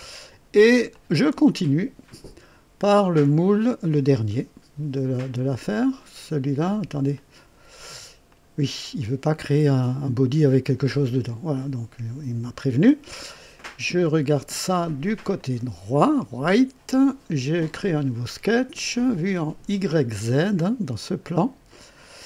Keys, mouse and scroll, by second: 0.9 click, 5.3 click, 7.1 click, 8.2 click, 15.3 click, 17.7 click, 19.7 click, 22.0 click.